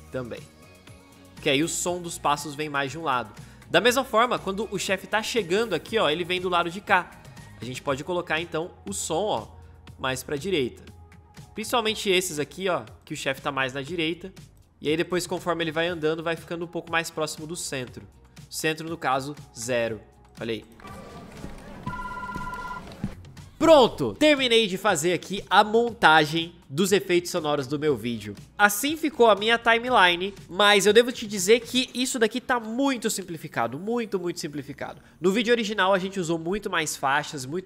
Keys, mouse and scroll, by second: 20.6 space.